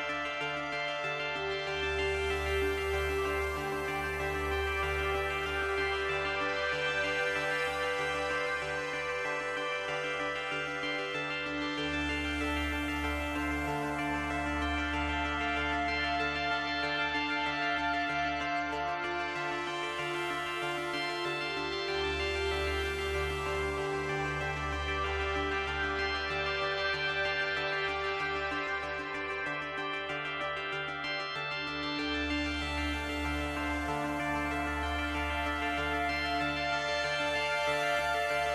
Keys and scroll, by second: 13.8 ctrl+z, 15.6 ctrl+z, 19.0 ctrl+z.